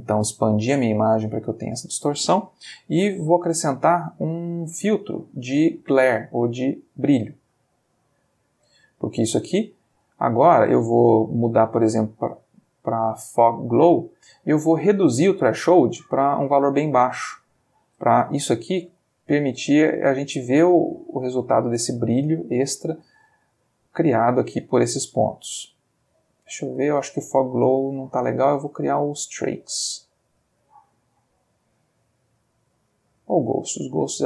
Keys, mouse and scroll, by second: 3.0 shift+a, 7.4 click, 8.4 click, 8.9 middle click, 10.3 ctrl+middle click, 11.0 ctrl+click, 13.3 click, 14.4 middle click, 15.0 click, 16.9 click, 18.3-22.9 shift+drag, 23.6-26.4 shift+drag, 27.6 click, 29.0 click, 30.8 click, 31.8 click, 34.0 middle click.